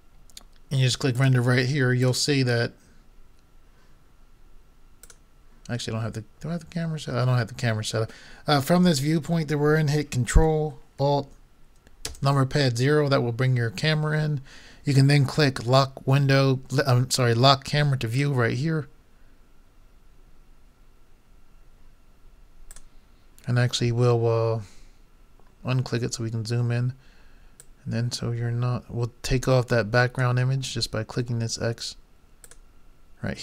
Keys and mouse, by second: 1.2-2.2 drag, 2.3 click, 7.1 middle click, 8.2-10.2 middle drag, 10.8 middle click, 12.0 ctrl+alt+KP_0, 18.1-20.2 drag, 22.8-24.9 drag, 24.9 middle click, 32.6 click.